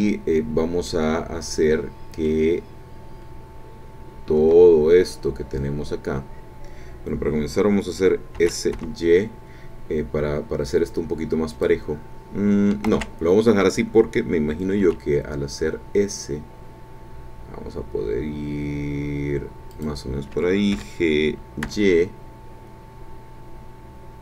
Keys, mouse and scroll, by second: 0.0-0.3 scroll down 1, 0.9-2.4 drag, 4.3 a, 8.3 s, 8.8 y, 11.5 click, 12.8 ctrl+z, 14.8 s, 19.7 click, 20.7 g, 21.6 y.